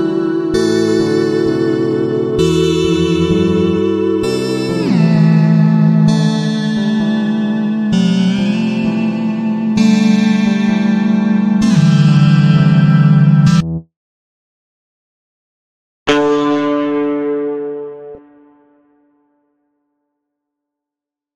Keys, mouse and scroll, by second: 3.8-10.2 drag, 10.5-12.6 drag, 15.3 click, 20.0-21.3 drag.